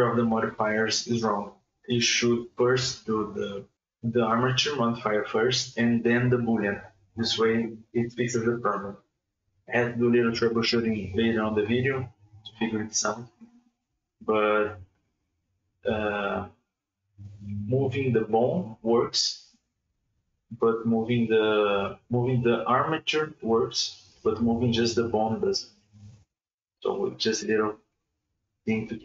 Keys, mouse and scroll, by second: 1.1-3.5 middle drag, 3.6-4.7 drag, 4.7 right click, 5.0 right click, 5.6 KP_Divide, 6.2-8.2 scroll down 7, 8.2 click, 8.7 r, 9.3 r, 10.7 middle click, 11.4 KP_Divide, 12.1 scroll up 1, 12.2 r, 14.5-15.3 middle drag, 15.3 r, 19.2 KP_Divide, 19.6 KP_Divide, 20.3 scroll up 1, 20.4-20.7 middle drag, 20.7 KP_1, 21.1 r, 24.1 alt+r, 25.5 click, 26.0 click, 26.7 click, 27.3 r.